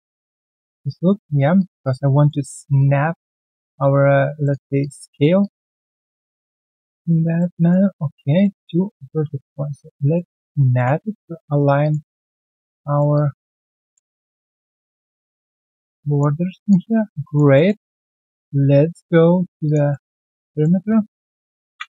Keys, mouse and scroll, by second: 0.6 alt+right click, 0.9 alt+click, 1.8 alt+click, 2.0 alt+middle click, 2.7 right click, 4.7 alt+click, 5.0 alt+middle click, 5.4 alt+click, 5.9 w, 6.1 alt+click, 7.0 shift+click, 7.6 alt+right click, 8.4 alt+middle click, 8.6 alt+right click, 9.0 alt+middle click, 10.2-10.9 typing, 11.3 alt+middle click, 11.5 alt+right click, 11.8 alt+click, 12.0 alt+middle click, 12.3 alt+right click, 12.5 alt+click, 12.8 alt+middle click, 13.1 alt+click, 13.7 alt+middle click, 14.1 alt+click, 16.7 alt+click, 17.0 alt+scroll down 1, 17.2 alt+click, 17.5 alt+middle click, 17.9 alt+right click, 18.4 ctrl+right click, 19.6 alt+click, 19.6 ctrl+right click, 19.9 alt+middle click, 20.2 alt+click, 20.5 alt+middle click.